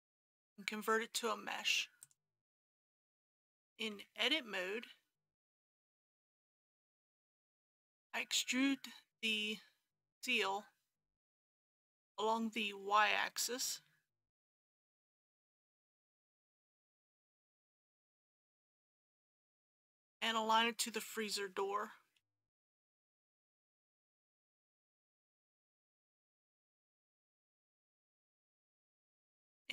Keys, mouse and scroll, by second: 2.0 click, 4.0 Tab, 6.5 a, 8.7 middle click, 10.5 shift+middle click, 13.6 e, 14.7 y, 16.8 KP_Decimal, 17.1 KP_0, 17.4 KP_5, 22.2 a, 23.6 KP_3, 25.5 g, 25.7 y, 29.2-29.7 scroll down 1.